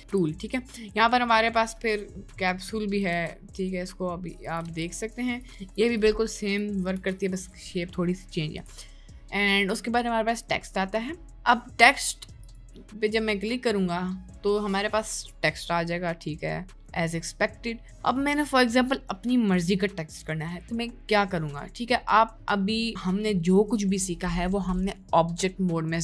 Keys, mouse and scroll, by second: 0.1 shift+a, 3.3 shift+d, 4.8 shift+d, 7.0 Delete, 8.7 shift+a.